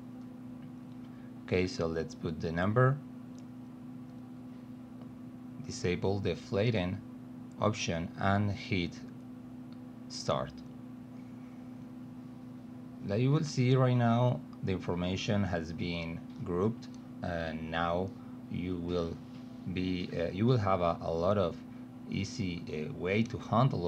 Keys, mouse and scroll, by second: 0.0-2.1 typing, 9.2 click, 12.7 click, 16.1-16.8 drag, 18.2 click, 19.8 click, 21.5 click, 23.0 click.